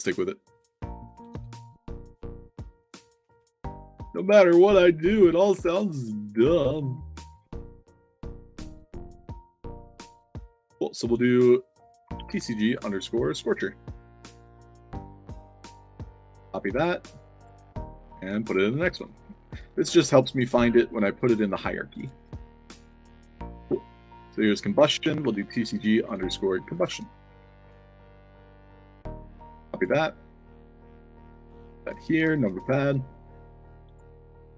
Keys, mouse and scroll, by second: 0.4 click, 3.0 click, 3.2 click, 3.6 ctrl+v, 8.6 click, 8.9 click, 11.2 click, 12.2 shift+c, 13.2 ctrl+v, 14.3 click, 15.4 click, 16.2 click, 16.6 ctrl+c, 16.6 click, 17.3 click, 17.9 click, 18.1 ctrl+v, 18.6 space, 19.0 shift+p, 19.5 ctrl+a, 19.7 ctrl+c, 20.3 click, 20.9 click, 21.9 click, 22.0 ctrl+v, 22.3 click, 22.9 click, 23.2 click, 23.5 f, 24.3 click, 25.2-27.8 typing, 28.8 ctrl+a, 29.1 ctrl+c, 29.6 click, 30.3 click, 31.2 click, 31.4 ctrl+v, 31.8 space, 32.2 shift+p, 33.8 click.